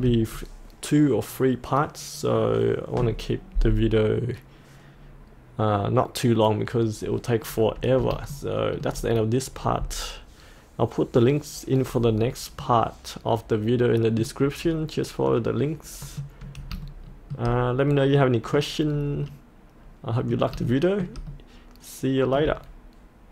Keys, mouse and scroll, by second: 7.0-7.5 scroll up 1, 7.5-8.1 scroll down 1, 8.3 shift+middle click, 12.0-12.6 scroll down 1, 12.6-14.7 middle drag, 14.7-15.0 scroll up 1, 15.3 middle click, 18.0 middle click, 18.9-19.3 scroll down 1, 19.3 middle click, 20.7 shift+middle click, 21.3 middle click, 21.9 middle click.